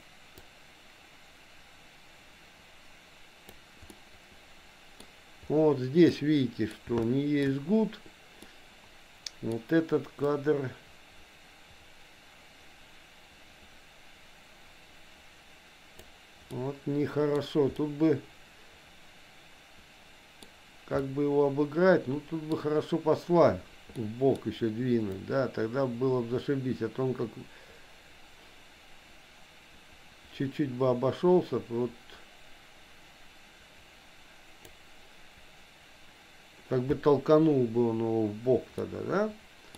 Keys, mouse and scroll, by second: 0.5-3.6 drag, 3.9-5.0 middle drag, 6.1 middle click, 7.1 shift+middle click, 8.4-9.5 middle drag, 10.3-16.1 drag, 16.5 middle click, 17.9-20.5 middle drag, 21.0-22.5 middle drag, 24.0 middle click, 25.3-34.8 drag, 38.9 middle click.